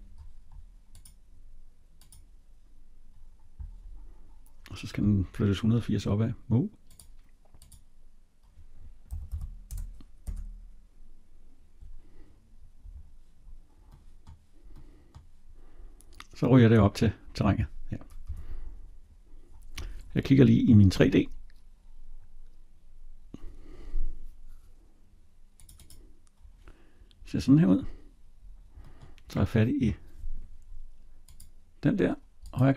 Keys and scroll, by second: 10.0 Return, 18.1 Escape.